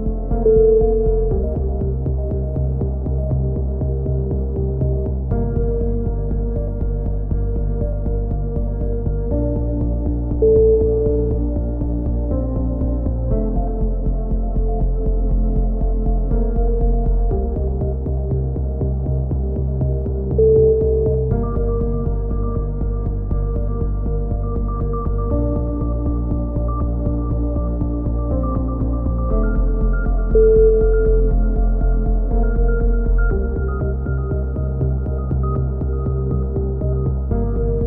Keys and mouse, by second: 0.1 right click, 1.1 middle click, 1.3 right click, 1.7 click, 1.8 ctrl+z, 3.0 click, 5.0-8.0 drag, 5.6 right click, 5.9-7.3 middle drag, 7.3 right click, 9.8 a, 10.2-12.3 middle drag, 12.3 right click, 14.6 click, 17.0 click, 20.1 right click, 21.0-22.1 middle drag, 22.1 x, 23.4 z, 23.6 z, 23.9-25.6 right drag, 25.4 f, 25.6 a, 26.1 click, 26.9-28.2 right drag, 28.1 f, 28.4-29.8 right drag, 29.4 f, 29.8 a, 29.9 z, 30.4 z, 34.6-36.9 middle drag, 36.9 click.